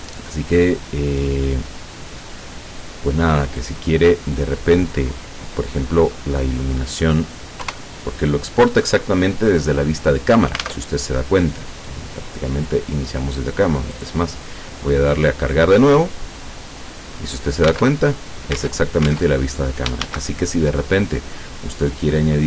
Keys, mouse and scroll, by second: 0.3 click, 3.7 click, 4.5-4.9 scroll down 1, 5.9-6.5 scroll down 1, 7.7 KP_0, 10.8 alt+Tab, 12.0 click, 14.0 click, 17.9 alt+Tab, 18.7 alt+Tab, 20.2 shift+a.